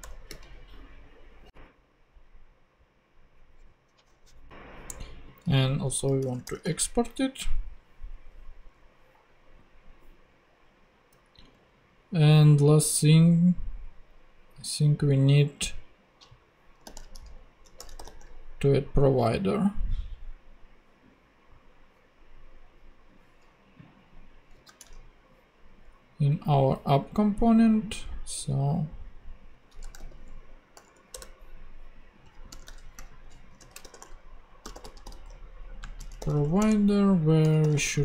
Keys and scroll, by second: 0.0 super+BackSpace, 0.3 ,, 4.1 shift+super+p, 5.7 super+Left, 5.9-6.9 typing, 11.5 super+Tab, 16.8 super+f, 17.8-18.5 typing, 24.5 super+c, 24.8 super+Tab, 29.8 Return, 30.7 super+;, 32.5 Return, 32.9-38.0 typing.